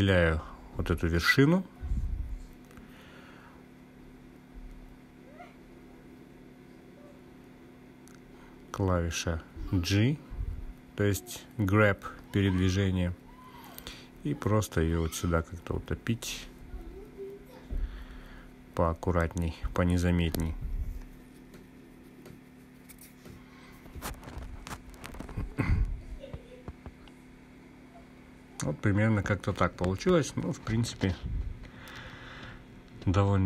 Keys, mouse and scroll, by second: 0.1 click, 4.0 click, 5.6 click, 7.1-8.2 scroll up 3, 8.2-9.2 drag, 10.0-13.2 scroll up 2, 14.2 g, 17.4 Left, 17.7 Left, 18.8 Down, 19.2 Down, 20.6 Right, 21.6 Left, 22.6 Return, 25.0 click, 25.2-26.4 drag, 26.8-28.1 scroll down 1, 28.1-32.8 drag, 28.1-28.4 scroll down 1, 33.2-33.4 scroll down 1.